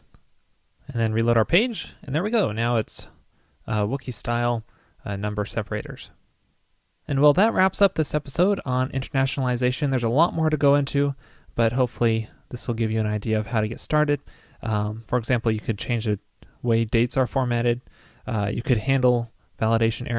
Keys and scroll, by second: 1.0 super+r.